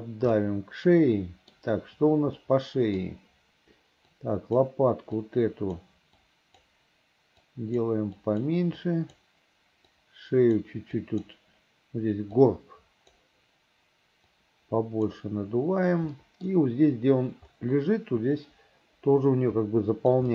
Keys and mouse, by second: 0.5-1.6 middle drag, 2.5 middle click, 4.2 right click, 5.3 right click, 6.3 click, 7.5 click, 8.3 click, 8.9 click, 10.0 click, 11.1 click, 12.5 click, 14.4 click, 16.3 middle click, 18.5-20.3 drag.